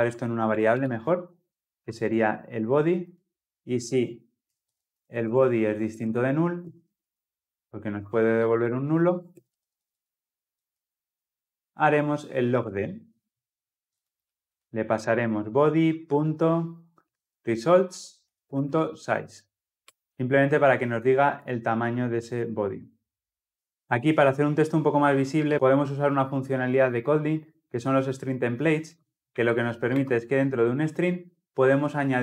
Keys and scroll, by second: 0.6 ctrl+alt+v, 10.4 Tab, 12.4 ctrl+alt+l, 12.6 ctrl+alt+o, 18.1 Return.